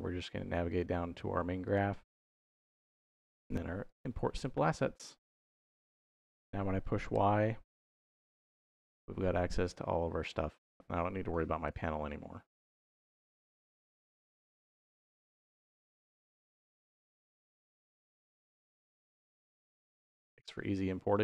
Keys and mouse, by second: 0.5 click, 1.5 click, 2.6-3.9 drag, 5.3 middle click, 7.0 y, 11.5 n, 13.6 click, 14.4 x, 16.1 y, 17.4 y, 18.4 y, 19.2 y, 19.7 y, 21.0-21.2 shift+middle drag.